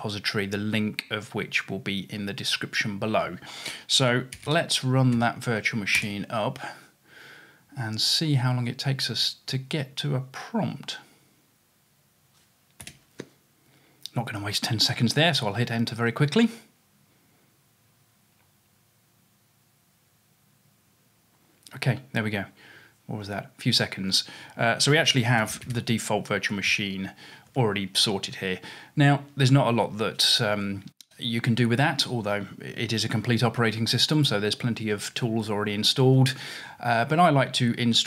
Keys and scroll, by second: 3.8-5.0 typing, 5.2 Tab, 6.0 typing, 12.9-13.4 typing, 19.2 typing, 25.2-27.5 typing.